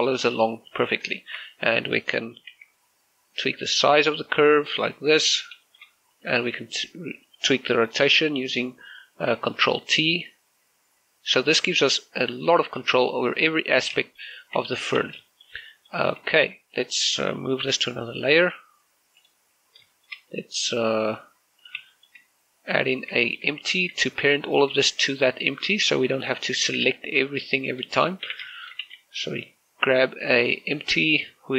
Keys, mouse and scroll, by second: 1.6 right click, 2.0 shift+middle click, 2.4 right click, 3.3 alt+s, 5.9 right click, 6.4 shift+middle click, 6.9 right click, 7.5 g, 8.0 right click, 10.4 ctrl+t, 13.2 right click, 13.5 scroll down 1, 13.8 shift+middle click, 14.0-14.4 scroll up 1, 14.8 shift+middle click, 15.4 Tab, 15.7 scroll down 1, 15.8 z, 16.1 shift+middle click, 17.1 shift+middle click, 17.5 right click, 18.4 m, 20.0 click, 20.7 shift+middle click, 21.1 right click, 22.4 click, 22.7 shift+middle click, 23.6 click, 24.0 shift+middle click, 24.6 shift+a, 25.7 shift+middle click, 26.6 shift+middle click, 27.0 right click, 27.4 typing, 27.7 click, 29.0 a, 29.3 shift+middle click, 29.6 shift+a.